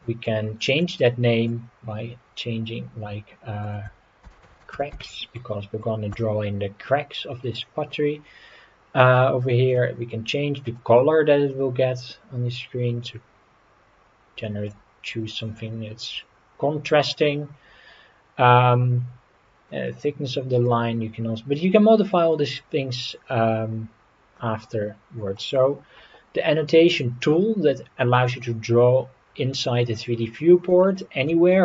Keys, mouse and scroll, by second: 0.9-6.2 drag, 9.7 click, 24.4-25.4 middle drag, 30.8-31.3 shift+middle drag.